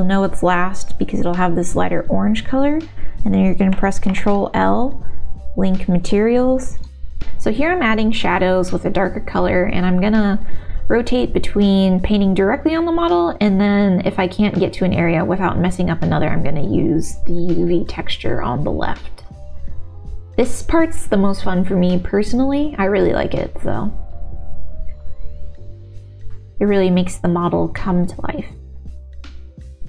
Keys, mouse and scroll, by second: 4.1 ctrl+l, 7.2 shift+click, 7.9 click, 8.3 middle click, 9.7 click, 10.0 middle click, 10.3 shift+a, 10.4 ctrl+shift+z, 11.3 middle click, 11.8 click, 11.9 middle click, 12.2 ctrl+s, 12.8 middle click, 13.5 click, 14.0 click, 14.2 middle click, 14.8 ctrl+z, 15.4 ctrl+z, 15.5 click, 15.7 ctrl+z, 16.3 middle click, 16.5 middle click, 16.9 click, 17.2 ctrl+z, 17.2 ctrl+z, 17.3 click, 17.9 middle click, 18.1 middle click, 18.3 ctrl+s, 19.3 click, 19.6 click, 19.8 ctrl+z, 20.0 ctrl+z, 20.5 click, 20.7 click, 21.3 click, 21.4 shift+z, 21.6 shift+z, 21.6 shift+x, 22.1 ctrl+z, 22.3 ctrl+z, 22.5 ctrl+z, 22.7 ctrl+z, 22.8 click, 23.1 middle click, 23.7 click, 23.9 shift+x, 24.7 middle click, 25.2 shift+x, 25.6 shift+x, 25.7 shift+x, 26.2 middle click, 26.7 middle click, 27.0 click, 27.1 middle click, 27.7 middle click, 28.0 f, 28.3 click, 28.6 ctrl+z, 28.6 middle click, 29.0 ctrl+s, 29.2 middle click, 29.8 shift+x.